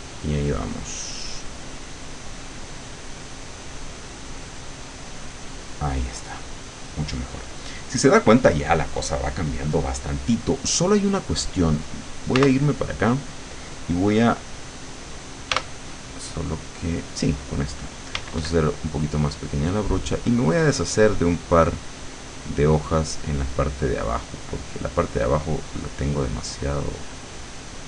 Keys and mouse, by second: 1.9-5.7 drag, 12.4 w, 15.5 e, 18.2 d, 19.0-24.3 drag, 25.0 click.